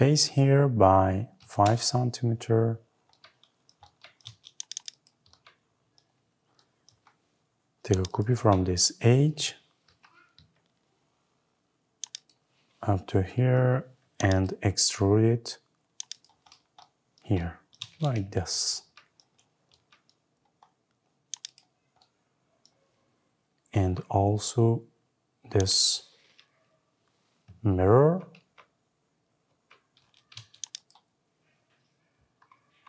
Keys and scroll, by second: 1.5 Return, 9.6 Left, 10.2 Right, 17.7 Escape, 27.8 Escape.